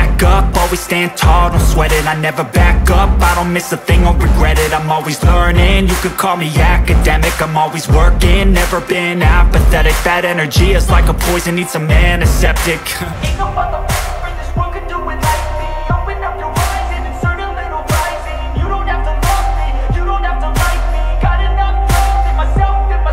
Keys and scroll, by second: 4.8 ctrl+space, 6.1 ctrl+space, 7.8 ctrl+alt+space, 8.4 ctrl+alt+space, 22.1 ctrl+alt+shift+space.